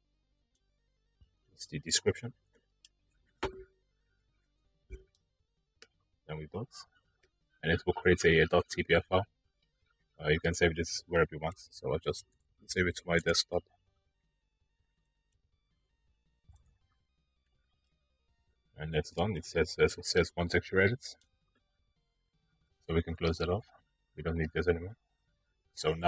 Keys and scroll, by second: 0.0 i, 2.7 BackSpace, 3.1 u, 10.9-12.3 typing, 14.1-14.9 typing, 17.1 typing.